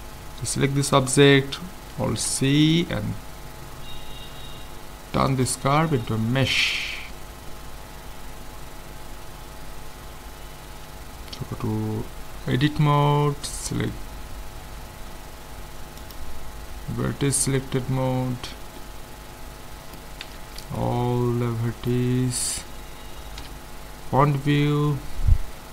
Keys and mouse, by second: 2.1 alt+c, 11.5 Tab, 17.5 click, 18.8-25.7 middle drag, 20.3 a, 23.4 KP_1.